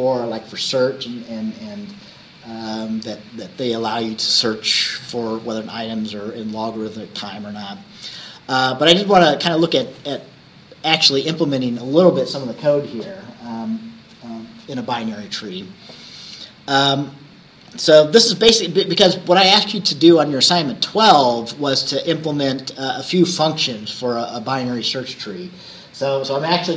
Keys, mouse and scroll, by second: 20.3-20.9 scroll up 2, 21.3-21.7 scroll up 2, 21.8-22.9 scroll up 4.